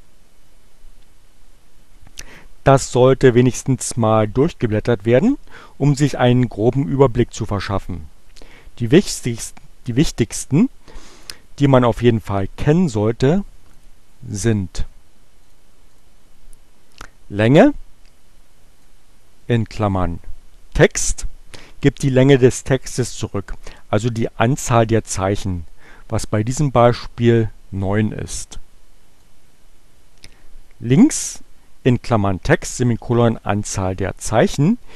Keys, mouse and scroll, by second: 12.1-14.1 drag, 15.4 click, 15.9 click, 18.8-20.0 drag, 27.2 Return, 29.1-30.5 drag.